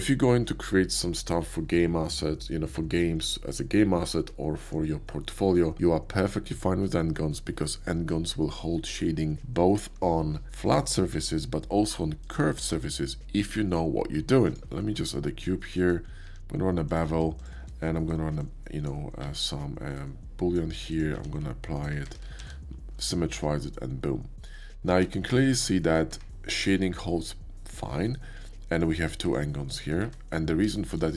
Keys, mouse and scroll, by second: 12.2 click, 12.6 shift+a, 14.4 click, 14.6 shift+a, 15.4-15.7 drag, 15.7-16.1 middle drag, 16.2 q, 16.9 click, 17.4-17.9 shift+drag, 17.9-18.3 shift+middle drag, 18.4-18.8 shift+drag, 19.2 alt+w, 19.9-20.5 drag, 20.9 click, 21.1 q, 21.7 click, 22.0 Tab, 22.3 alt+x, 23.0 middle click, 24.4 Tab, 24.8 q, 25.4 alt+click, 25.8-26.1 alt+middle drag, 26.1 Tab, 26.7 middle click, 28.7 click, 29.2 click, 29.8 middle click, 30.0 Tab, 30.7 shift+middle drag.